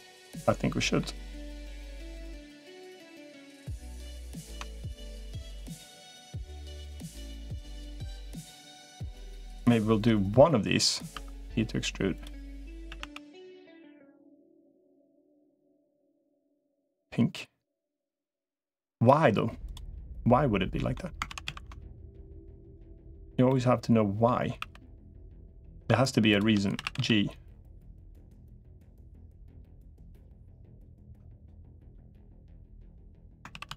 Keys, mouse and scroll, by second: 0.0 middle click, 1.9 shift+click, 3.3 middle click, 4.3 ctrl+z, 4.5 middle click, 5.9 g, 7.9 middle click, 10.9 e, 12.7 a, 12.9 g, 15.3-17.5 middle drag, 19.7-20.7 middle drag, 21.1 ctrl+z, 21.3 ctrl+z, 22.1 click, 23.3 middle click, 24.5 e, 26.1 shift+click, 26.5 a, 26.9 g, 30.9 Tab, 31.7-33.0 middle drag, 33.7 ctrl+z.